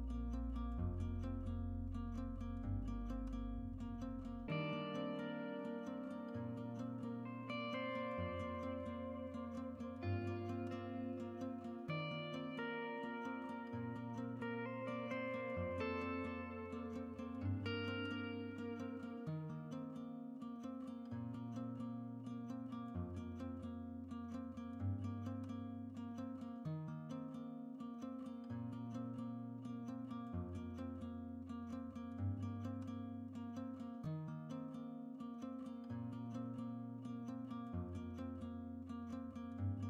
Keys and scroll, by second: 4.2 shift+Tab.